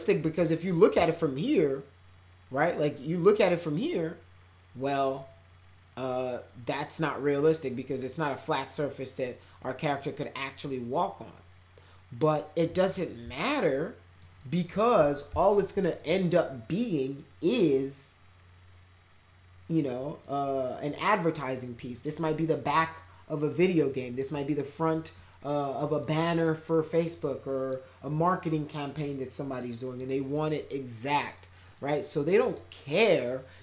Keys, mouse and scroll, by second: 1.0-12.6 alt+middle drag, 12.9-14.2 alt+middle drag, 14.4 alt+middle click, 15.2 f, 15.5 z, 16.0 middle click, 20.2 middle click, 21.0 middle click, 21.8 middle click, 22.2 middle click, 23.5 middle click, 24.3-25.7 middle drag, 26.0 middle click, 26.6 middle click, 27.2 middle click, 28.3 middle click, 29.5 middle click, 30.3 middle click, 31.7 middle click, 32.4 click.